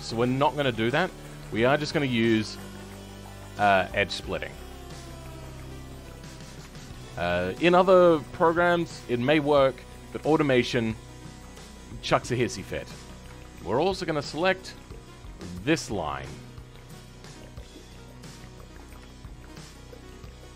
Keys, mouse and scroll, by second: 0.8 click, 1.4-5.5 scroll up 5, 5.8-6.5 scroll down 11, 6.5 Tab, 6.8-8.0 middle drag, 8.0 scroll up 3, 8.7 shift+middle click, 9.2-9.6 scroll up 3, 9.6-12.8 middle drag, 12.8-13.4 scroll up 5, 13.4 shift+middle click, 14.3 Tab, 15.2 alt+click, 15.9 scroll down 4, 16.3-18.1 shift+middle drag, 18.1-19.4 scroll up 2, 19.4 alt+shift+click, 20.0-20.5 scroll down 2.